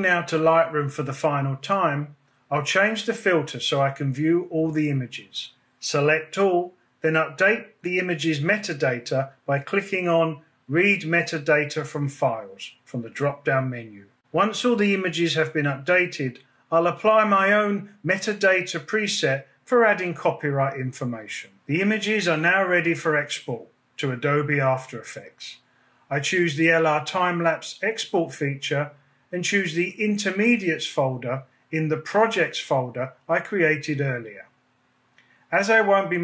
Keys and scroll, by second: 5.4 super+a.